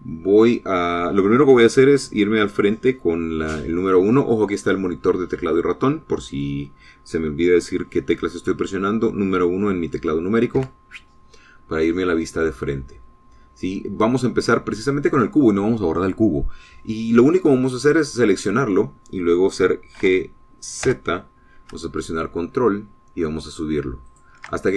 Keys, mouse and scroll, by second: 11.4 KP_1, 12.5-13.0 scroll up 2, 13.0 scroll down 2, 18.9 click, 20.8 g, 21.6 z.